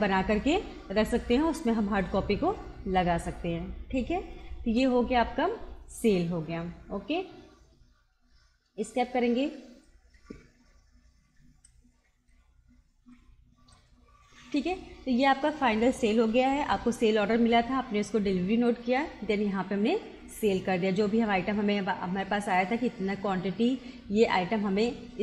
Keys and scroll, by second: 7.7 Escape.